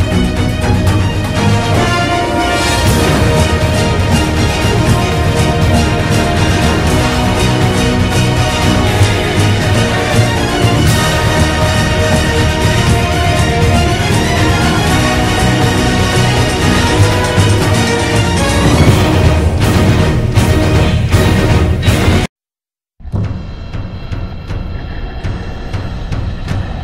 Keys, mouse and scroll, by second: 8.6 ctrl+-, 11.3 ctrl+=, 14.2 ctrl+-, 15.0 ctrl+-, 15.8 b, 21.4 ctrl+=, 22.1 ctrl+z, 23.0 ctrl+z, 24.4 ctrl+z, 25.3 ctrl+z, 26.3 ctrl+z, 26.7 right click.